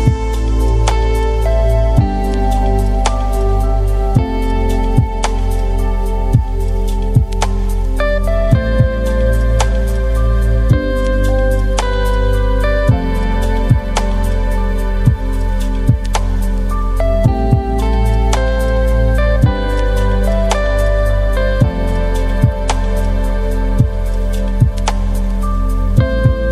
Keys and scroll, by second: 15.5 Delete.